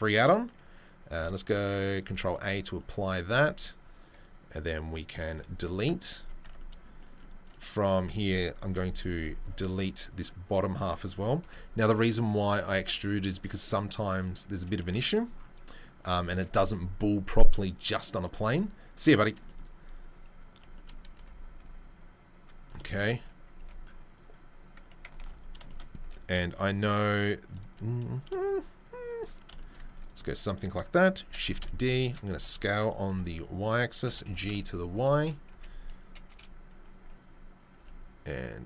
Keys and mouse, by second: 2.0 ctrl+a, 2.9-24.3 right drag, 4.1 click, 5.4 Delete, 6.2 drag, 6.4 Tab, 7.0 shift+middle click, 7.9 1, 8.7 KP_3, 9.1 KP_1, 9.7 z, 11.4 b, 12.7 Delete, 14.8 z, 23.5 ctrl+r, 24.3-26.2 middle drag, 25.1 ctrl+r, 26.0 3, 26.2 click, 26.2 shift+middle click, 26.4 shift+click, 26.5-28.8 shift+middle drag, 28.1 click, 28.8 click, 28.8 middle click, 29.0 shift+click, 29.2-38.6 shift+middle drag, 31.2 shift+d, 32.3 s, 34.0 g, 35.5 a, 36.3 KP_3, 37.8 g.